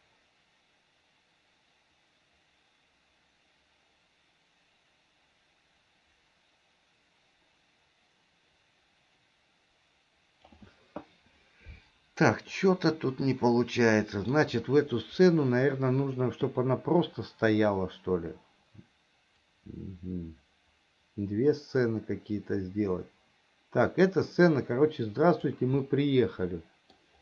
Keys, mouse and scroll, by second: 12.7-14.7 middle drag, 19.8-26.1 drag, 26.2-27.2 middle drag.